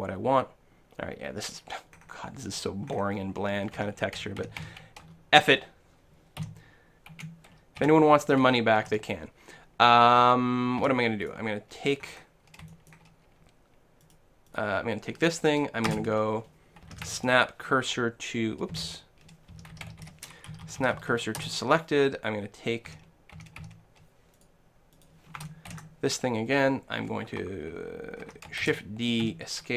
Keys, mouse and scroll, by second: 1.9-5.0 middle drag, 3.8 Tab, 4.2-4.6 a, 5.1-7.7 middle drag, 7.1 k, 7.9 l, 8.8 KP_1, 10.8 a, 11.4-13.0 right drag, 12.7 click, 13.0-14.2 middle drag, 14.2-16.2 right drag, 15.9 space, 18.7 space, 20.7 Down, 22.9 a, 23.4 a, 23.6 a, 24.4-26.8 right drag, 25.7 ctrl+l, 27.0 middle click, 27.3-29.0 right drag, 28.7 shift+d.